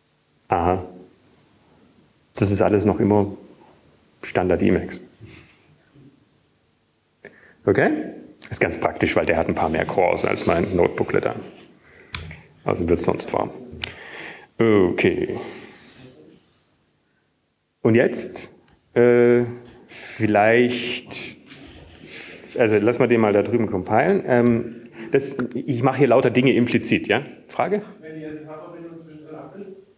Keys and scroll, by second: 24.2 alt+`.